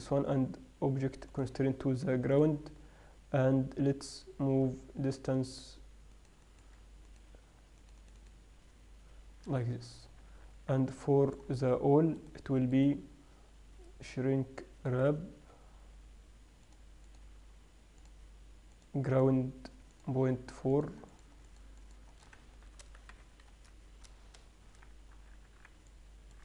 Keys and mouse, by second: 10.3 middle click, 10.5 z, 11.6-13.0 middle drag, 14.8 middle click, 16.9 middle click, 17.1-18.3 drag, 18.3-22.9 middle drag, 23.1 BackSpace, 25.4 z, 25.9 z.